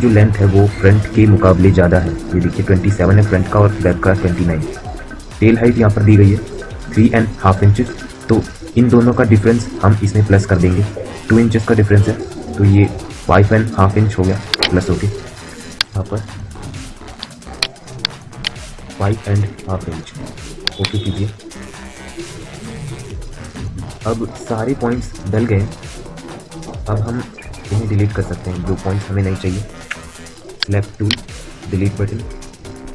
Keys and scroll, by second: 29.6 End, 31.5 Delete.